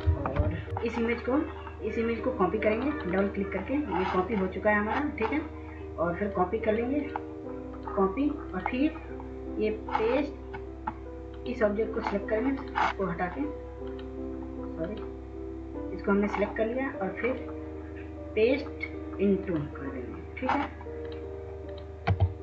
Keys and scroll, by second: 0.0 ctrl+0, 0.7 w, 22.0 w.